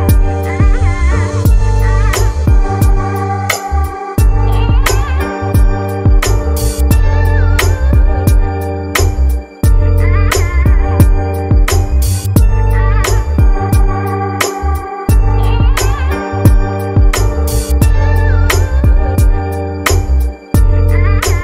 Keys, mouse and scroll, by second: 2.8-3.4 scroll down 1, 3.4-5.1 shift+middle drag, 5.1 s, 11.0-18.7 shift+middle drag, 18.7 click, 21.3-21.4 drag.